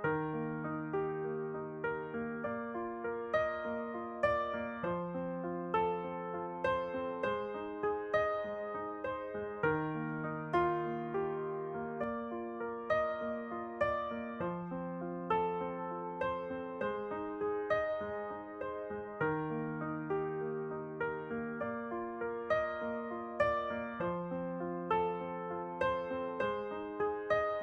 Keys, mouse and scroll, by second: 6.1 ctrl+r, 7.1-9.3 middle drag, 7.6 w, 13.7 ctrl+r, 16.1-18.2 middle drag, 16.8 ctrl+r, 17.8 ctrl+r, 19.4-21.3 right drag, 21.3 w, 26.2-27.6 middle drag.